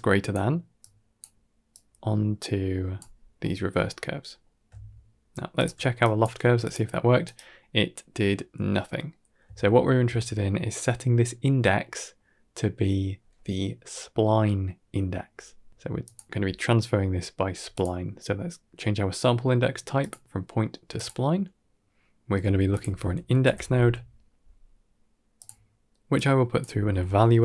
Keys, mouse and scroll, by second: 0.7 click, 1.6-2.8 drag, 3.3 middle click, 3.7 scroll down 1, 3.8-4.3 middle drag, 5.4 alt+shift+click, 5.9 click, 6.3 g, 7.0 middle click, 7.6-8.1 middle drag, 8.9 middle click, 9.5 ctrl+middle click, 10.0 middle click, 11.5-12.0 middle drag, 15.3-15.7 middle drag, 15.7 shift+a, 18.5 click, 19.3-20.9 drag, 22.3 shift+a, 26.0-27.4 drag.